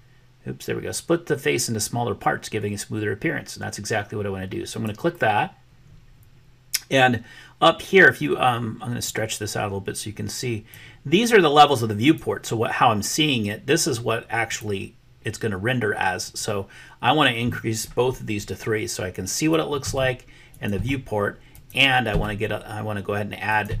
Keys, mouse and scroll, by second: 9.0-10.8 drag, 12.2-14.7 drag, 16.4-19.6 drag, 19.8 3, 20.6-21.8 drag, 22.1 3, 23.7-23.8 drag.